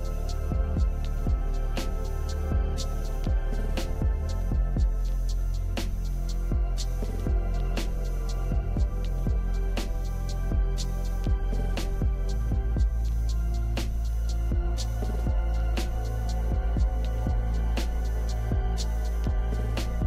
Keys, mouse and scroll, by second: 2.7 alt+[, 7.8 ctrl+c, 7.8 ctrl+v.